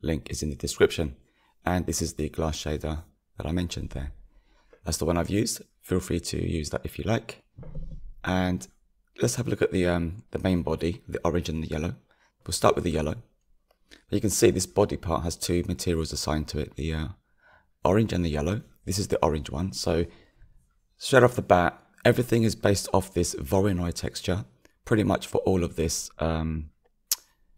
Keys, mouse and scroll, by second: 3.9 click, 6.2 click, 13.6-20.0 drag, 22.9-24.0 drag.